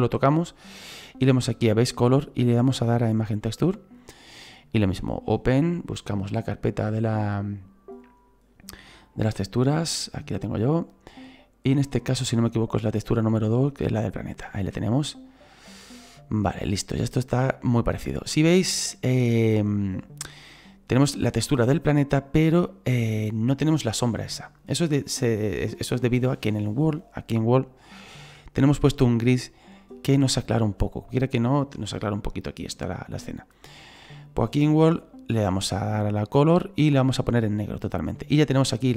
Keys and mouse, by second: 1.6 click, 3.2 click, 5.0 click, 6.5 click, 8.8 click, 9.8 click, 11.8 click, 13.1 click, 14.5 shift+middle click, 18.3 shift+middle click, 23.8 middle click, 27.9 click, 36.5 click, 37.6 click, 38.7 right click.